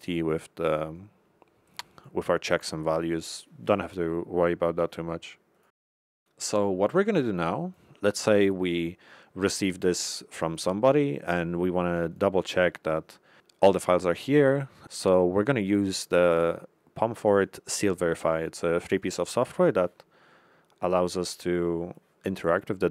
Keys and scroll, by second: 17.3 Left.